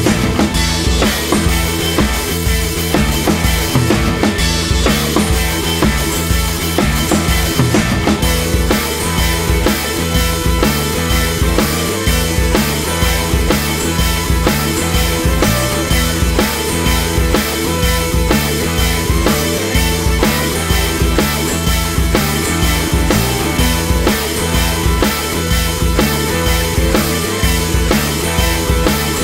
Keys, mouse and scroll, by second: 0.3-0.6 drag, 0.6 shift+middle drag, 0.8-1.6 drag, 1.6 shift+middle click, 1.9-2.3 drag, 2.3-2.7 middle drag, 2.7 KP_1, 2.8 ctrl+z, 2.9-3.5 drag, 3.7-4.4 drag, 4.4 scroll down 1, 4.4 shift+middle drag, 4.5 scroll up 2, 4.6 drag, 4.8 scroll down 2, 4.9 shift+middle click, 5.2 f, 5.3 scroll down 1, 5.4 shift+middle click, 5.5 f, 6.8 middle click, 6.8 scroll up 1, 7.0 drag, 7.1 middle drag, 7.3 click, 7.6 drag, 7.8 scroll down 1, 7.9 drag, 8.2 middle click, 8.8-9.4 drag, 9.4 middle click, 9.6 click, 10.0 middle click, 10.1 f, 10.3 shift+middle drag, 10.6 f, 10.7 scroll up 2, 10.8 shift+middle click, 11.1 scroll down 2, 11.3 scroll up 1, 11.5 shift+middle click, 11.6 f, 11.7 middle drag, 12.0 f, 12.3-12.7 drag, 12.7 ctrl+z, 12.8 drag, 13.0 middle click, 13.1 scroll up 1, 13.2-14.1 drag, 14.1 middle click, 14.2 scroll up 3, 14.3 shift+middle click, 14.4-15.0 drag, 15.0 shift+middle click, 15.1-15.5 drag, 15.5 scroll down 3, 15.6 middle click, 15.7 scroll up 3, 15.9-16.3 drag, 16.3 scroll down 1, 16.4 middle click, 16.5 scroll up 1, 16.6 click, 16.9 shift+middle click, 17.0-17.6 drag, 17.6 middle drag, 17.8-18.3 drag, 18.3 scroll down 2, 18.3-19.5 middle drag, 19.5 scroll up 2, 19.7 middle click, 20.5 middle drag, 20.7-21.0 drag, 21.0 middle click, 21.1 drag, 21.4 scroll down 1, 21.5 scroll up 2, 21.7-22.2 drag, 22.2 middle drag, 22.4-23.0 scroll down 1, 23.6 click, 23.7 middle click, 23.9-24.4 middle drag, 24.4 click, 25.2 click, 26.4 click.